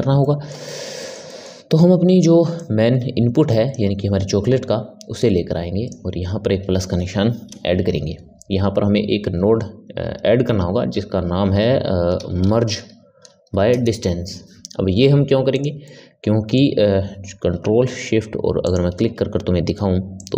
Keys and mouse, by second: 2.5 click, 5.1 click, 15.7-18.6 middle drag, 18.6 ctrl+shift+click, 20.1 click.